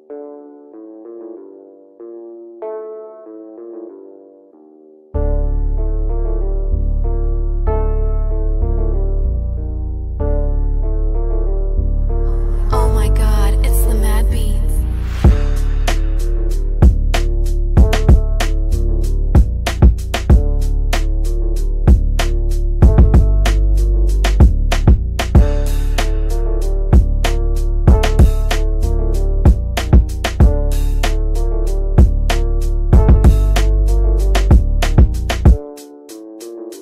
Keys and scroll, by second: 17.5 F3, 17.8 Escape, 26.5 g.